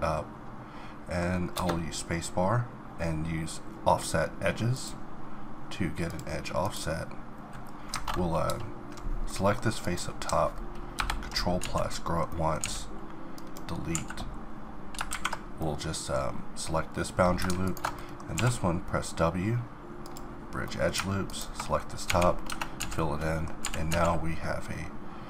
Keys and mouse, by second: 0.8 click, 1.5 space, 6.6-8.5 drag, 8.5 ctrl+KP_Add, 9.5-10.9 middle drag, 10.9 ctrl+KP_Add, 11.6 z, 12.6 x, 13.6 middle click, 13.9 a, 17.6 click, 18.4 w, 19.3 click, 19.8 middle click, 21.3 click, 22.1 f, 22.5 Tab, 22.8 z, 23.6 g.